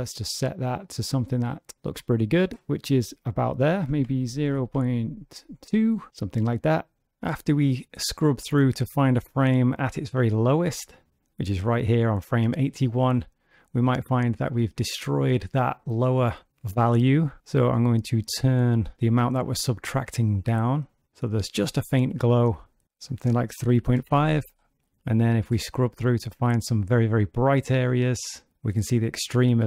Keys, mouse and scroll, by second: 3.5 click, 7.3 click, 18.1 click, 22.8 click, 24.8 click.